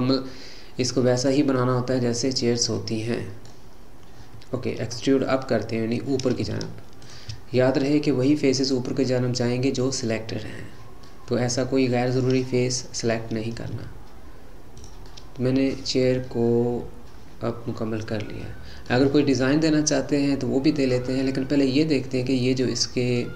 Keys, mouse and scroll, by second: 1.6-5.7 middle drag, 5.7-6.9 scroll down 1, 7.0 shift+click, 7.7-10.7 middle drag, 11.1 middle click, 11.7-12.1 scroll down 1, 12.1-13.7 middle drag, 13.7 e, 15.1-18.2 middle drag, 19.1-23.3 middle drag.